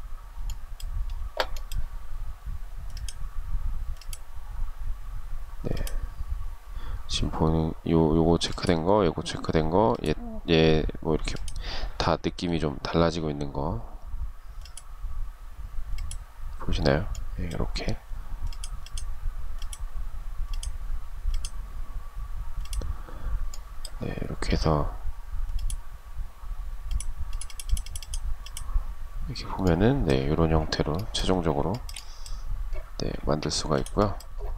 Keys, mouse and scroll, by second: 30.9 shift+middle click, 32.3 space.